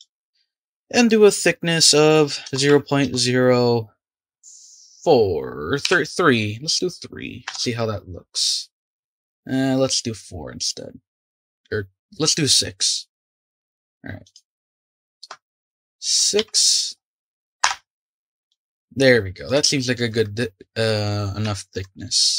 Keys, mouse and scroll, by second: 0.5-3.6 drag, 14.2 click, 18.5-21.1 middle drag, 21.1-21.4 scroll up 4, 21.4-22.3 shift+middle drag.